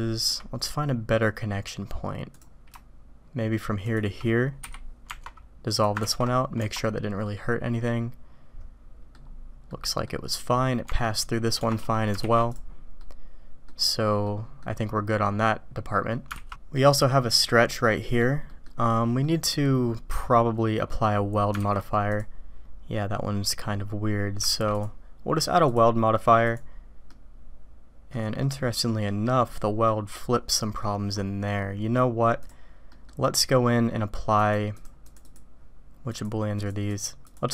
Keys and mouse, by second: 3.8 shift+click, 5.0 Tab, 6.0 ctrl+x, 6.6 Tab, 7.2-9.1 drag, 9.7 middle click, 12.1 alt+v, 12.9 click, 14.2 click, 15.1-16.1 drag, 16.5 alt+v, 16.7 click, 17.6 click, 18.5 click, 19.3 click, 20.9 click, 21.8 alt+v, 25.6-26.6 drag, 27.0-28.1 drag, 28.3 click, 29.1 right click, 29.4 click, 29.4 right click, 32.3 click, 32.9 click, 32.9 right click, 34.5 click, 35.1 click, 36.2 click, 36.6 click, 36.9 click, 37.3 click.